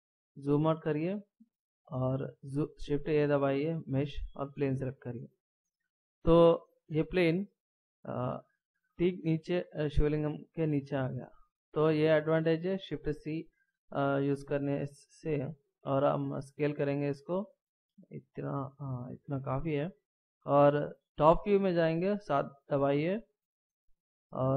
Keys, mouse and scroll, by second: 0.1 scroll down 1, 2.9 shift+a, 6.8-7.6 scroll up 2, 7.6 scroll down 2, 8.5 middle click, 12.2-13.9 scroll down 1, 13.9 middle click, 15.8 s, 16.8 s, 22.2 KP_7, 22.9 scroll down 1.